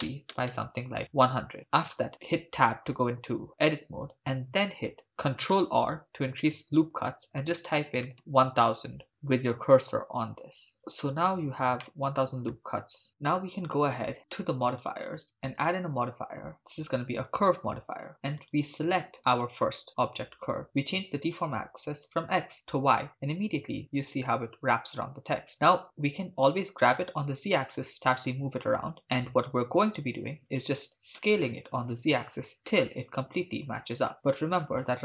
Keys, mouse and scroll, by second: 0.0-0.5 typing, 1.2 Return, 1.6 ctrl+middle click, 2.2 Tab, 5.0 right click, 5.0 r, 5.6 ctrl+r, 10.7 click, 11.9 middle click, 12.6 Tab, 14.8 click, 15.6-17.5 drag, 18.4 click, 21.3-22.2 drag, 25.6 g, 26.4 z, 29.8-31.2 right drag, 31.2 s, 31.4 z.